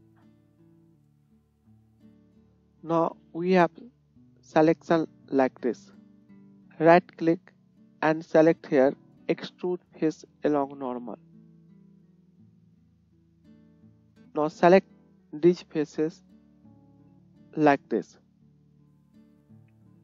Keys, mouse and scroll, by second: 2.0 shift+click, 2.1-6.4 shift+middle drag, 6.4-15.5 drag, 14.1-15.6 shift+middle drag, 14.1-15.5 shift+right drag, 15.6-16.8 shift+drag, 16.8 shift+middle click, 16.9-19.1 shift+drag, 19.1 shift+middle click, 19.2 shift+click, 19.6 shift+middle click, 19.6 shift+right click.